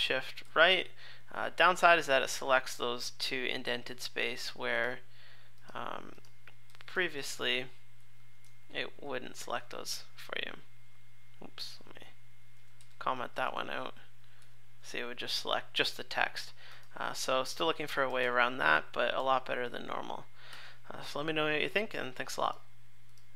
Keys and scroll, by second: 0.4 shift+super+Left, 6.7 super+/, 7.3 alt+super+Right, 8.4 shift+super+Left, 9.4 super+s, 11.3 alt+super+Left, 12.8 super+/, 13.2 super+s, 13.7 alt+super+Right, 14.4 shift+super+Left, 18.2 super+/, 19.2 super+/, 20.5 super+s.